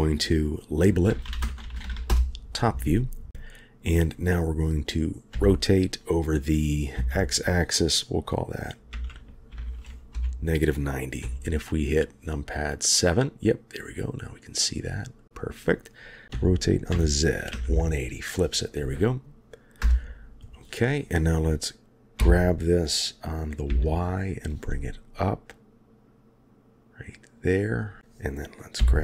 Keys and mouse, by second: 5.3 r, 11.2 KP_7, 16.3 r, 22.1 g, 28.8 g.